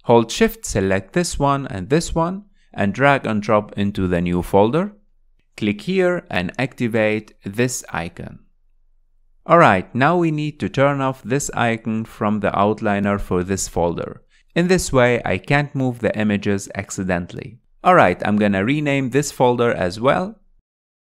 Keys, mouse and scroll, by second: 2.2 click, 3.4 shift+click, 4.1 click, 7.9-11.2 drag, 13.6 drag, 16.6 click, 17.3 click, 18.3 click, 18.9 click, 20.7 drag.